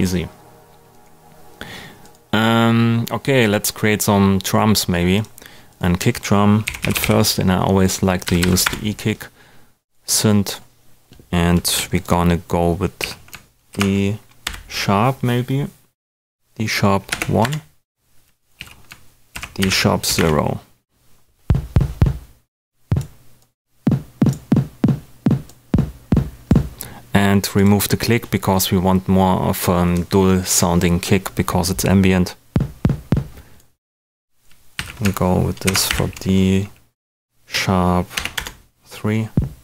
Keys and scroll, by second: 6.4-7.5 typing, 8.2 Down, 8.6 Return, 13.0 super+a, 13.7 shift+super+d, 14.4 shift+#, 17.1 l, 17.4 Return, 18.2 super+Return, 18.5 super+a, 19.3 shift+super+d, 19.6 shift+#, 20.0 0, 20.1 Return, 34.7 super+a, 35.6 shift+super+d, 36.7 #, 38.1 3, 38.3 Return.